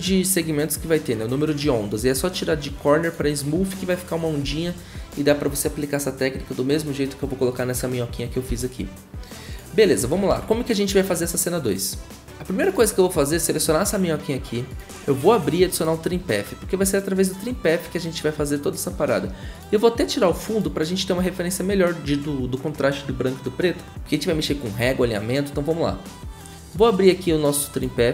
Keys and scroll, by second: 4.4 v, 8.5 Delete, 10.3 ctrl+a, 12.2 ctrl+s.